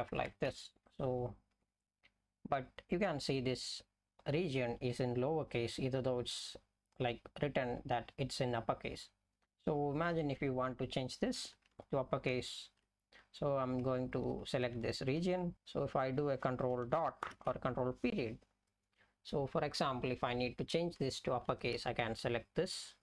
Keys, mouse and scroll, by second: 0.9 Up, 1.2 Up, 1.6 Down, 1.8 Down, 11.8-12.5 Left, 13.1 Right, 13.3 Right, 13.5-14.3 Right, 14.8-15.4 Left, 16.0 click, 18.6 BackSpace, 21.8-23.0 Right.